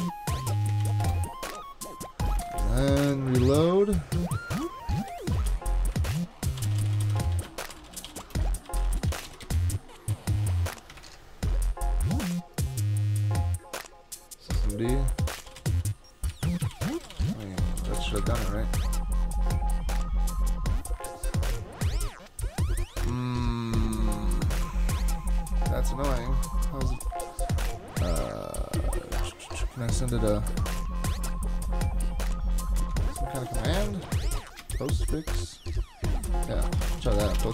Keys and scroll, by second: 0.5 super+k, 0.8 super+v, 1.0 Return, 2.4 super+Tab, 5.5-9.7 typing, 6.0 super+Tab, 11.0 super+Tab, 14.5 super+Tab, 14.9-18.7 typing, 26.2 super+Tab, 32.8 super+Tab, 33.2-35.1 typing, 36.4-37.5 typing.